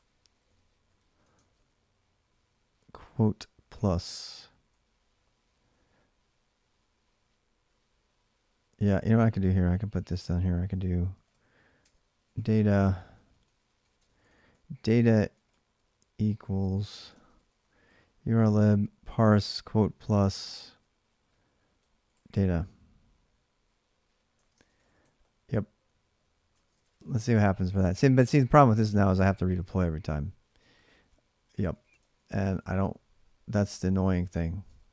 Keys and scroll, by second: 0.0-1.3 typing, 1.1 ctrl+[, 1.2 ctrl+j, 2.5-5.9 typing, 8.4-22.5 typing, 24.1-25.3 typing, 26.3 ctrl+[, 26.5 typing, 26.7 Return, 28.5 ctrl+a, 28.6 ctrl+a, 30.6-32.1 typing, 32.3 ctrl+a, 32.5 ctrl+a, 33.8-34.6 typing.